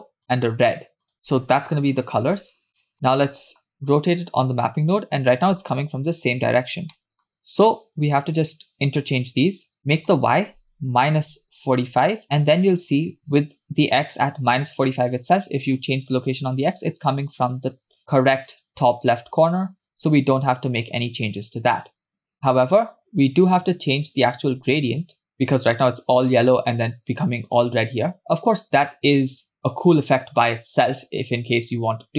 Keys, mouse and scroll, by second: 1.1 click, 2.7 scroll down 2, 2.8 middle click, 3.3 middle click, 3.7-5.5 drag, 6.6-6.9 scroll up 2, 7.0 middle click, 7.4-7.8 scroll up 2, 9.9-12.0 drag, 12.2-13.5 shift+drag, 15.2-23.4 shift+drag, 24.9-32.1 shift+drag.